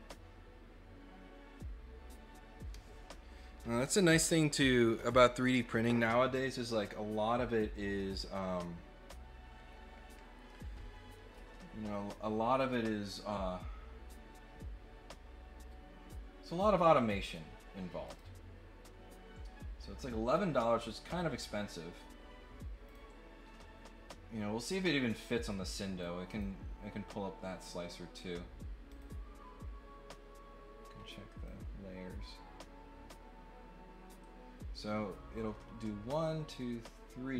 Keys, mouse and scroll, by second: 16.5 click, 18.0 click, 22.8 click, 25.9 click, 28.9 click, 31.4-37.3 drag.